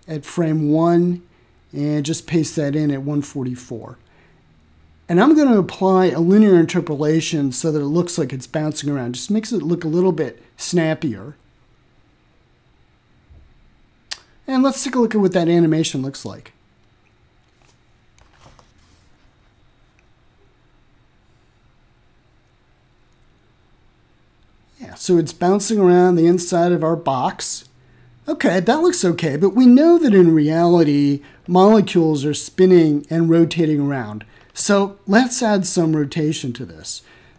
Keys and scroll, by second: 0.4 ctrl+v, 17.7 1, 18.2 4, 19.5 Return.